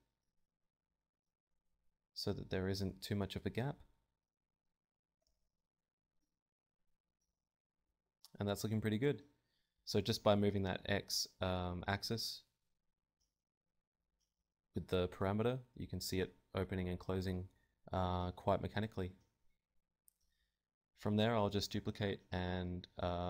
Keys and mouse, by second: 0.3 Tab, 0.5 KP_7, 1.0 g, 1.8 Tab, 1.8 click, 3.0 Tab, 4.8 g, 5.1-6.3 right drag, 5.5 g, 6.2 Tab, 6.2 click, 7.8 Tab, 8.4 g, 9.1 Tab, 14.3 Tab, 14.7-15.7 drag, 15.1 KP_7, 15.7 z, 16.5 Tab, 17.1 ctrl+Tab, 17.5 shift+s, 18.3 Tab, 18.5 right click, 18.9 shift+d, 19.9 ., 20.5 s.